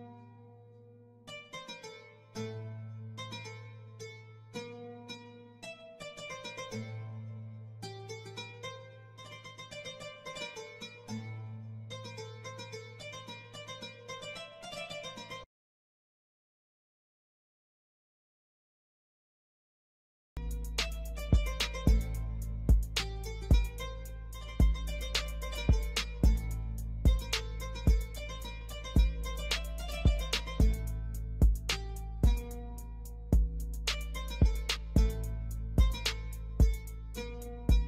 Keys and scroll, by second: 0.2 F3, 5.2 Escape, 8.3 ctrl+u, 8.5 Escape, 18.5 Escape, 19.1 F4, 19.9 F3, 20.5 F2, 23.6 space, 30.3 Delete.